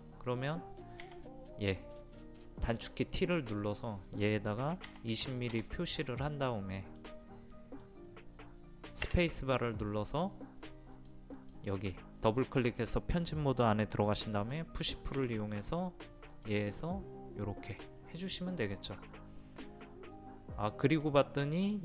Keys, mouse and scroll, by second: 1.0 t, 3.2 click, 4.9 KP_2, 5.2 KP_0, 6.5 middle click, 6.9 scroll up 1, 7.6 middle click, 9.9 space, 11.0 click, 15.2 typing, 18.3-21.8 middle drag.